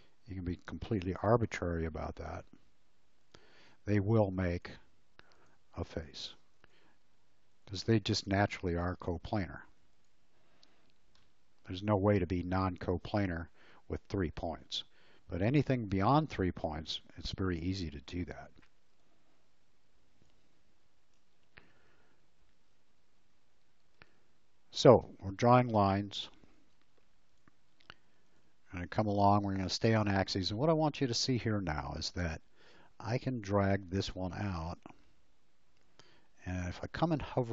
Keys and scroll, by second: 8.5 space, 21.2 Delete, 26.7 l.